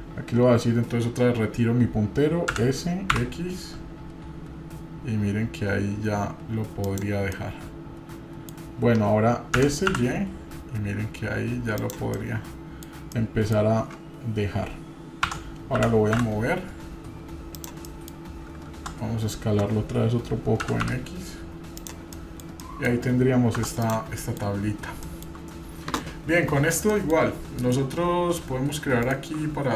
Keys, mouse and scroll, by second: 7.3-8.5 middle drag, 9.6 s, 12.1 middle click, 13.2 middle click, 15.3 Tab, 15.8 g, 17.9 middle click, 18.7 Tab, 20.6 s, 22.1 middle drag, 22.6 middle click, 23.6 Tab, 23.8 drag, 24.2 middle drag, 24.6 scroll up 1, 25.1 shift+middle drag, 26.3-26.9 scroll up 2, 26.9 shift+middle click, 27.3 scroll up 2, 27.7-28.4 middle drag, 29.0 shift+right drag.